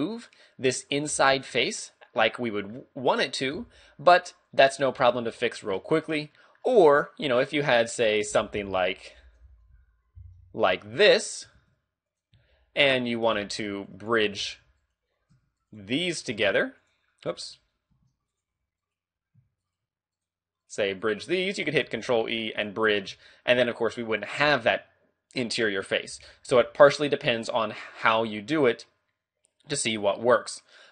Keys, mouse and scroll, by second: 0.3 right click, 1.2 g, 1.7 right click, 2.2 middle click, 3.6 x, 5.0 z, 5.3 middle click, 6.0-6.5 scroll down 2, 6.3 middle click, 7.4 right click, 8.6 y, 9.5 x, 10.2 g, 11.4 click, 11.6 ctrl+Tab, 12.8 alt+shift+right click, 13.5 ctrl+z, 13.7 alt+shift+right click, 14.4 a, 14.8 alt+right click, 15.4 a, 15.6 right click, 16.3 ctrl+Tab, 18.0 ctrl+Tab, 18.8 alt+right click, 19.7 shift+right click, 20.2 alt+right click, 20.7 shift+right click, 21.0 shift+right click, 21.9 ctrl+e, 23.1 z, 25.4 middle click, 26.1 a, 26.3 middle click, 26.5 z, 26.7 middle click, 28.2 middle click, 30.2 scroll up 2.